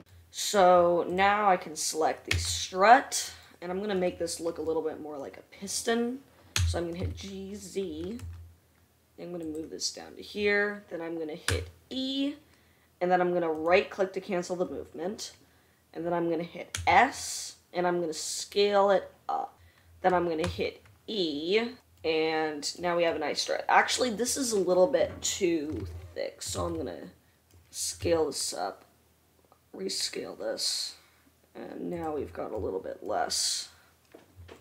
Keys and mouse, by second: 1.3 click, 1.7-26.0 middle drag, 2.8 Tab, 7.1 g, 12.1 e, 14.4 e, 17.4 s, 21.0 e, 26.4 ctrl+z, 27.2 ctrl+z, 28.5 s.